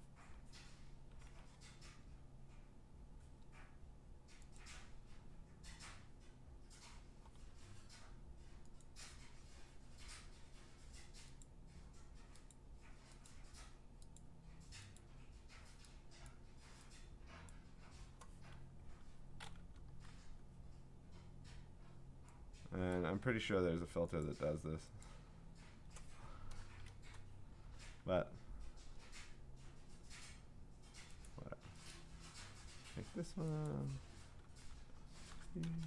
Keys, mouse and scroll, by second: 4.6 click, 8.8 click, 11.4 click, 12.5 click, 13.3 click, 14.2 click, 15.0 click, 16.3 click, 17.5 click, 18.9-20.6 typing, 23.0 click, 24.2 click, 25.0 click, 26.5 6, 27.6 1, 31.3 click, 31.9 click, 33.7 click, 35.1-35.8 typing.